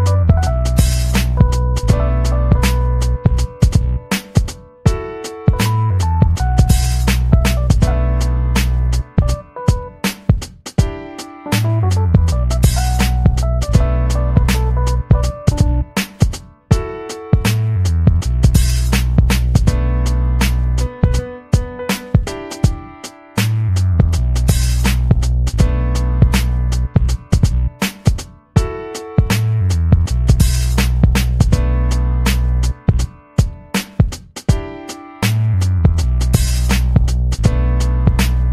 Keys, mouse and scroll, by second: 0.5 o, 0.7 s, 1.4 BackSpace, 2.0 alt+shift+o, 2.2 alt+shift+s, 7.2 click, 21.9-22.3 ctrl+scroll down 2, 22.6-22.9 ctrl+scroll down 2, 23.2-23.6 ctrl+scroll down 2, 24.6-25.6 drag, 26.0-27.3 drag, 27.5 ctrl+scroll down 2, 28.5-29.1 ctrl+scroll down 2, 29.8-30.2 ctrl+scroll down 2, 30.5-30.9 ctrl+scroll down 2, 31.6-32.9 ctrl+drag, 33.3-33.8 ctrl+scroll down 2.